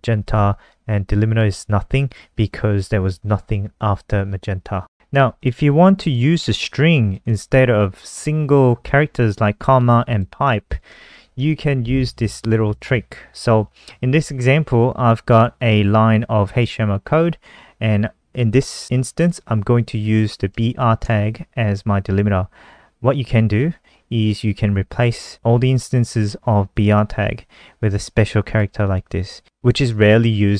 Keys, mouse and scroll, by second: 4.9 ctrl+alt+r, 5.3 click, 7.2 ctrl+c, 7.4 click, 8.8 click, 10.0 click, 10.6 shift+click, 12.1 click, 19.2 click, 20.7 shift+click, 28.0 click.